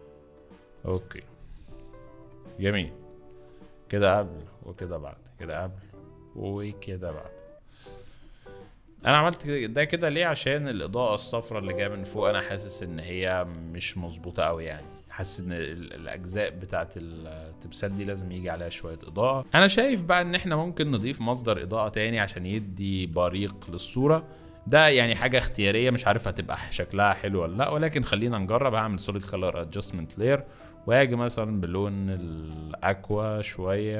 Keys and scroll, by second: 1.6 z, 7.9 z, 9.4 z, 11.2 z, 14.5 b, 16.2 z, 17.6 z, 20.2 z.